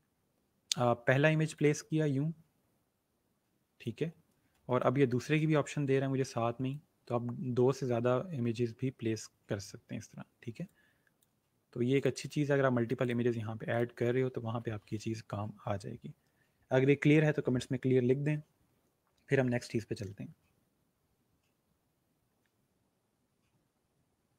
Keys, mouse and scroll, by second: 1.5 click, 4.5 space, 4.7 click, 5.0 space, 6.7 click, 11.1 space, 11.9 click.